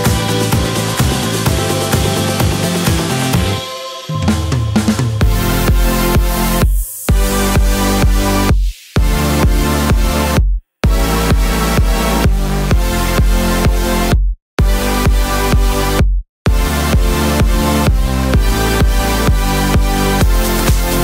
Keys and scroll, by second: 0.1 super+c, 0.3 super+v, 1.6 Right, 1.8 Right, 2.0 Right, 5.4-6.3 typing.